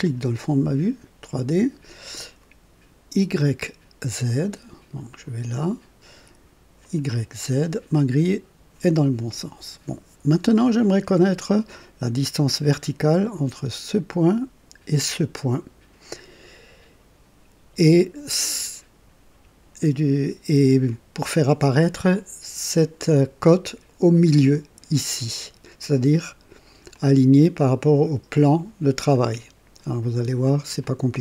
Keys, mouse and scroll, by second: 0.0 click, 5.0 click, 6.8 click, 22.1-23.1 drag, 26.9-28.6 drag, 29.1-30.0 drag, 30.8 click.